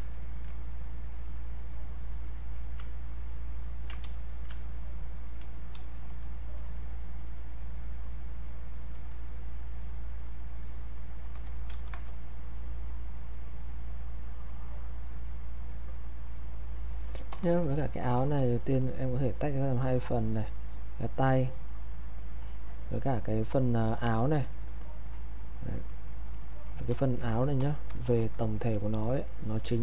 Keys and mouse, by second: 0.1 ctrl+right click, 4.1 alt+click, 5.9-10.9 alt+drag, 11.7 ctrl+1, 12.8-18.0 drag, 18.0 ctrl+shift+1, 18.8-28.2 drag, 28.2 ctrl+1, 29.2-29.8 drag.